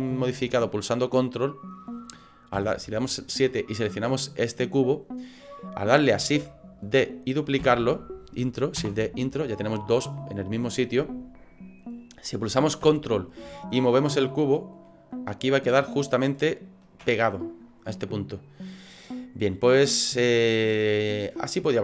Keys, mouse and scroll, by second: 2.5 KP_7, 3.7 right click, 7.6 shift+d, 13.8 ctrl+click, 19.7 right click, 20.4 middle click.